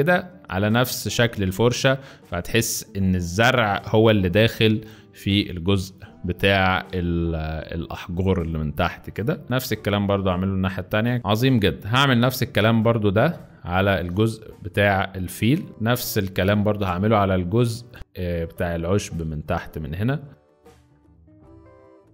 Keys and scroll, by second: 10.1 z, 10.9 space, 11.4 z, 12.6-13.2 typing, 15.7 space, 16.9 typing.